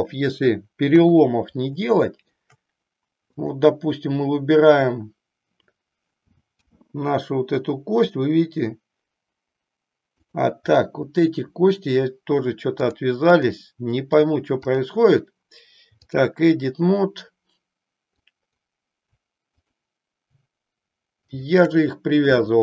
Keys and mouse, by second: 0.9 KP_3, 1.9 shift+middle click, 3.5 click, 6.5 g, 12.7 click, 14.1 click, 14.7 click, 18.2 click, 19.5 shift+click, 21.1 shift+click.